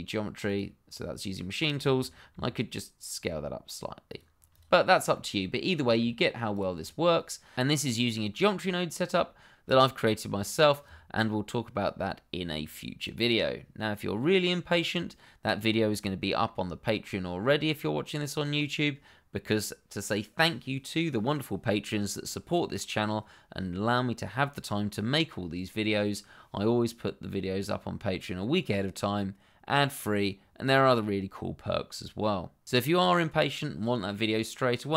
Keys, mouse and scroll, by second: 0.4 click, 2.3 s, 4.0 click, 4.6 double click, 4.8-5.1 scroll down 1, 5.1 middle click, 5.8 shift+middle click, 6.0-6.5 scroll up 1, 6.5 click, 9.6 click.